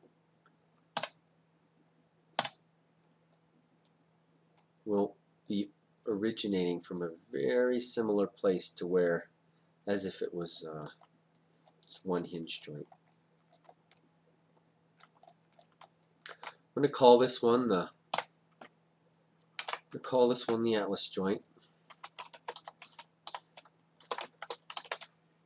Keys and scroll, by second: 1.1 d, 18.2 d, 19.6 ctrl+space, 22.4-24.8 typing, 24.9 Return.